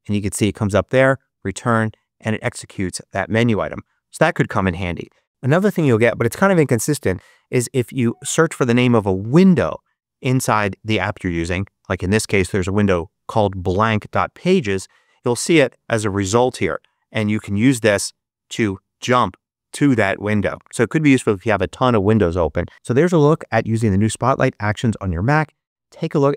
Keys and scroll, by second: 0.7 Return.